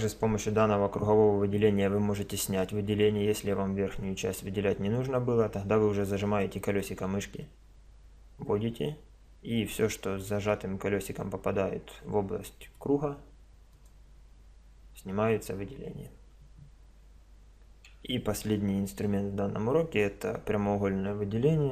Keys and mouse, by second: 0.5 c, 13.9-15.7 drag, 17.8 a, 19.1 middle click.